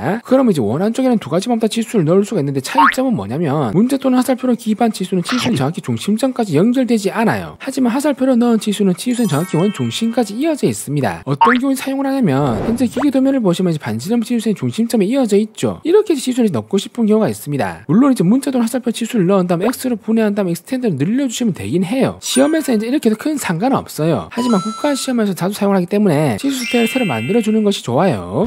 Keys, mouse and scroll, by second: 4.1 click, 6.8 click, 7.6 right click, 8.3 click, 9.7 click, 18.4 click, 18.4 right click, 19.4 click, 19.9-21.4 typing, 20.0 right click, 20.2 click, 20.2 right click, 20.4 right click, 21.6 click, 21.9 click, 22.2 click, 22.6 click.